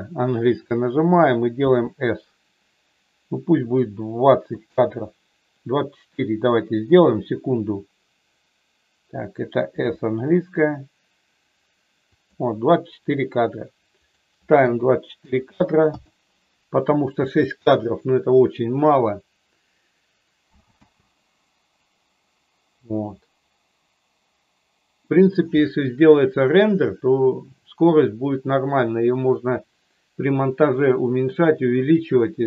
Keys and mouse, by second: 1.6 s, 4.5 click, 9.7 s, 12.1 click, 14.1-16.1 drag, 20.8 space.